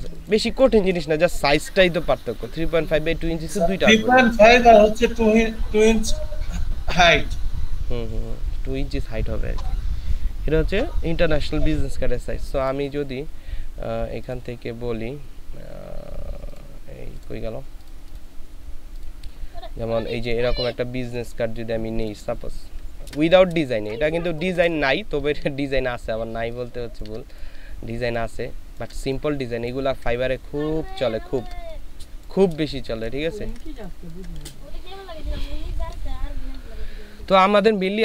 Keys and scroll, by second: 23.0 ctrl+v, 23.6 ctrl+space, 27.5 s, 32.6 ctrl+space, 33.9 ctrl+space.